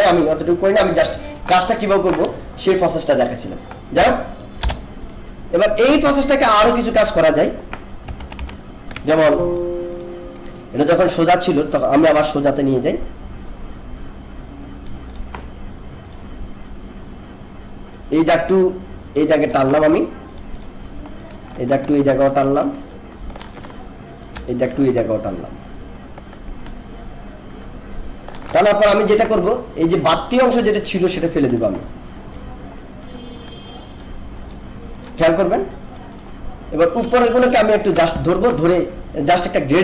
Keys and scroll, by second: 3.9 BackSpace, 8.2 ctrl+=, 9.1 alt+space.